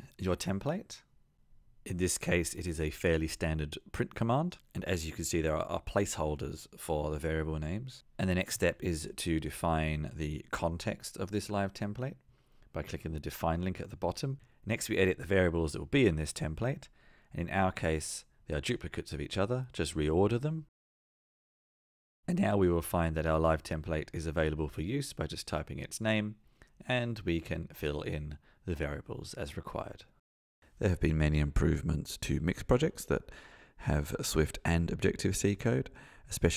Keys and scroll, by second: 24.8 Tab, 27.4 Return.